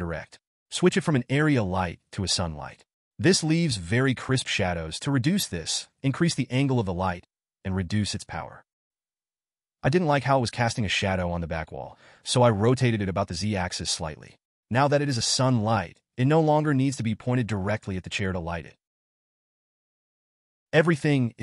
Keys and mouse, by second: 1.2 click, 5.0-6.2 drag, 8.4 click, 13.2 r.